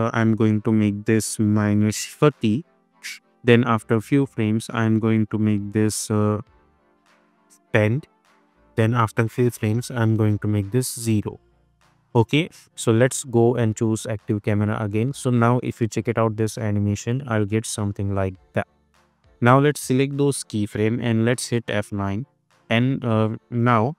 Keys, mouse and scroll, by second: 2.4 Return, 4.1-5.7 drag, 8.0 Return, 8.7-9.7 drag, 10.9 Return, 13.0 click, 15.8 space, 18.0-18.7 click, 18.5 space, 19.4-20.4 drag, 21.7 F9, 23.7 -.